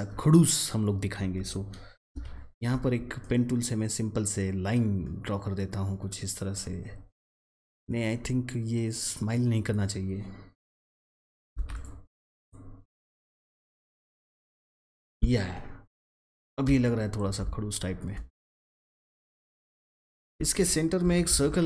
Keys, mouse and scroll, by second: 2.0 p, 3.1-4.6 drag, 11.6 click, 15.5-15.9 alt+scroll down 1, 16.6 space, 16.8 click, 17.1 space, 18.1-18.4 alt+scroll up 1, 18.4 click, 20.0 alt+scroll up 1, 21.0 ctrl+c, 21.2 ctrl+f.